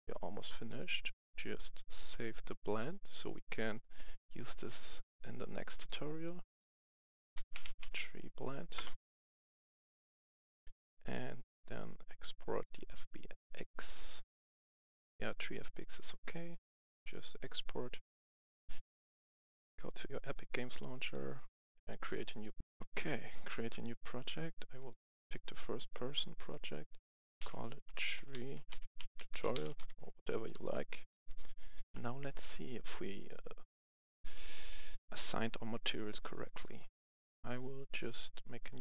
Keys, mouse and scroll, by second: 7.3-7.7 typing, 8.7 Return, 9.9 click, 19.0 F11, 19.8 click, 21.9 click, 22.7 F10, 23.3 click, 27.3-29.7 typing, 31.0 click, 31.8 F10, 33.0 click, 37.2 right click, 38.7 click.